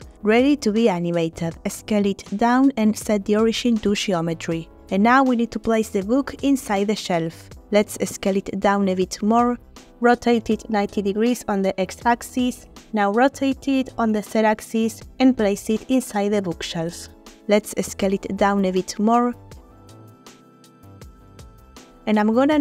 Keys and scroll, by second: 0.3 Tab, 1.2 s, 8.3 s, 9.7-10.7 typing, 12.3-13.1 typing, 15.3 y, 17.6 shift+s, 18.8 g, 19.0 z, 20.9 s.